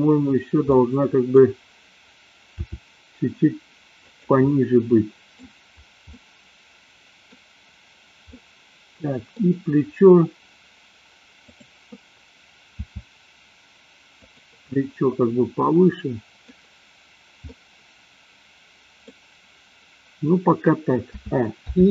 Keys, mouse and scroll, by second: 0.8 middle click, 2.6 r, 4.5-5.3 middle drag, 6.2-7.3 middle drag, 8.3-9.5 middle drag, 11.6 click, 12.8 r, 14.3 drag, 14.6-16.5 middle drag, 17.6-19.0 middle drag, 21.2 a, 21.7 i.